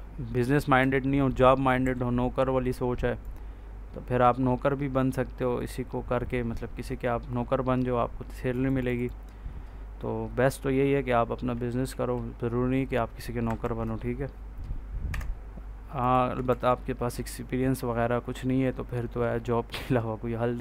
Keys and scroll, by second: 0.7 Down, 11.7 ctrl+s, 13.3 F4, 15.0 F8, 16.4 ctrl+a.